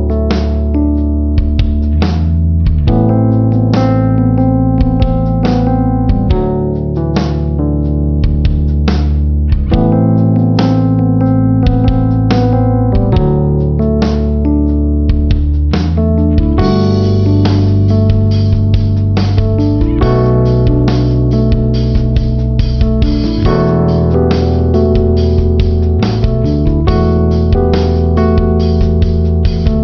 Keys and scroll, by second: 5.4 ctrl+alt+z, 19.1 ctrl+-, 21.9 ctrl+=, 24.5 space.